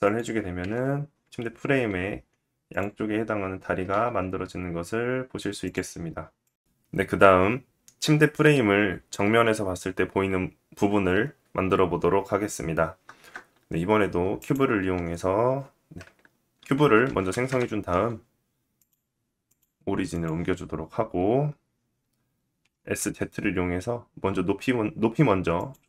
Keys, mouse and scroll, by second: 0.9 click, 1.8 g, 4.0 click, 4.4 g, 12.7 shift+a, 16.3-18.3 middle drag, 16.3 g, 18.3-25.3 drag, 22.2 s, 25.3-25.8 middle drag.